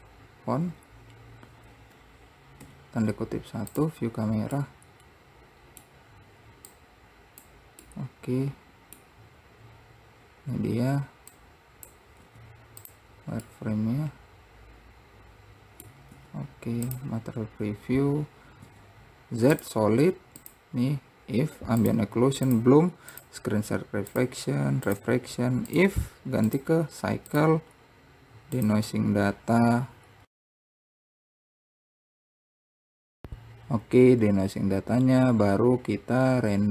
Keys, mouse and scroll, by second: 0.8 z, 4.8-6.9 middle drag, 6.9-8.1 drag, 8.1-9.4 middle drag, 9.4-11.5 scroll up 1, 11.5 click, 12.4 z, 13.6-16.3 middle drag, 16.3 z, 18.8 z, 20.5 click, 21.9 click, 22.6 click, 23.2 click, 24.2 click, 25.8-27.6 drag, 28.7 click, 30.4 click, 35.0-36.7 drag.